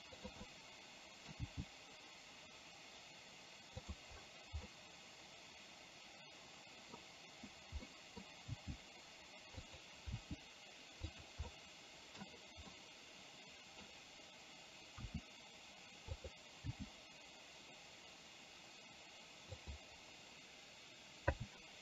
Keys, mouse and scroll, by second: 0.6-2.6 middle drag, 2.6 g, 4.8-7.1 middle drag, 8.0 scroll up 1, 8.7 g, 10.2 r, 11.6 middle click, 12.7-13.9 middle drag, 15.1 r, 16.8 g, 21.6 a.